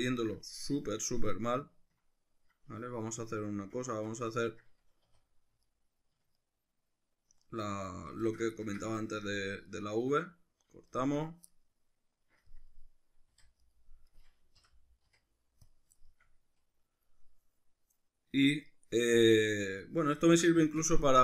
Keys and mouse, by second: 4.0 Tab, 5.1 2, 5.7 alt+right click, 6.4 alt+shift+right click, 8.2 alt+shift+right click, 8.6-13.8 ctrl+middle drag, 13.3 v, 14.1 right click, 14.6 l, 15.1 x, 16.0-21.2 shift+middle drag.